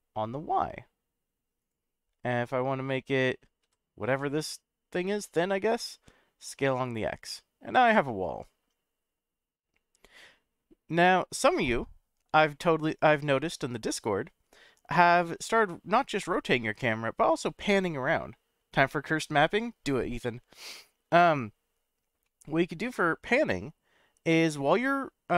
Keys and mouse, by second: 1.6 click, 3.6 s, 4.1 x, 6.8 click, 7.3-19.2 middle drag, 22.2-23.9 middle drag, 24.3-25.3 middle drag.